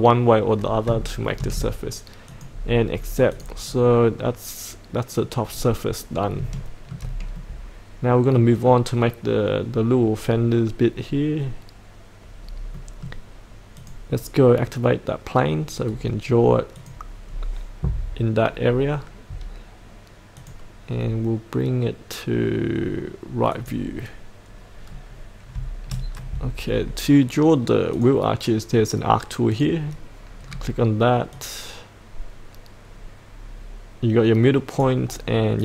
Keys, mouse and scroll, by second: 1.0 shift+middle click, 2.2 click, 2.9-3.3 scroll up 1, 3.3 click, 3.6 scroll down 1, 4.2-5.3 middle drag, 5.5-6.4 scroll up 1, 6.5 shift+middle click, 7.3 middle click, 12.4-12.7 scroll up 1, 12.7 middle click, 13.7 click, 15.8-16.8 scroll down 1, 16.8 click, 17.3-19.6 scroll up 1, 20.4 click, 20.9-23.5 scroll down 1, 23.5-24.6 drag, 24.8-25.5 scroll down 2, 26.1-27.9 scroll down 1, 27.9 click, 30.4-31.3 scroll down 1, 31.3-35.6 drag.